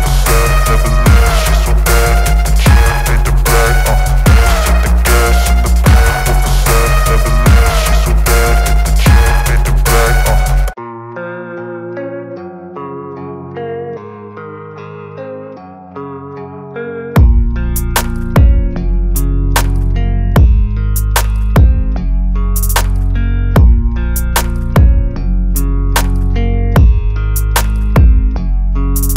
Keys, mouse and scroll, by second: 12.2 click.